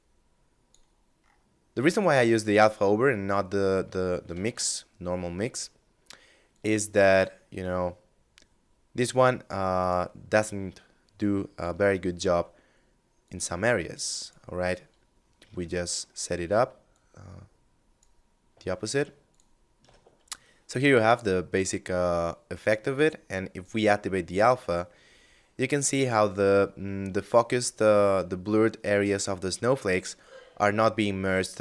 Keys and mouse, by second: 3.4 shift+a, 5.6 click, 9.0 click, 12.4 click, 13.9 middle click, 16.1 click, 18.4 ctrl+shift+click, 22.6 click, 24.1 middle click.